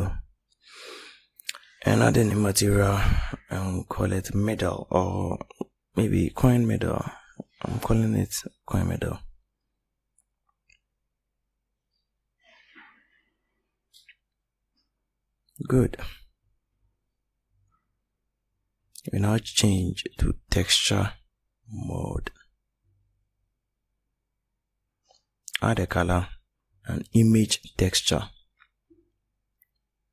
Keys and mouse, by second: 1.1-1.9 drag, 7.3-11.6 middle drag, 9.0 d, 17.9-19.8 drag.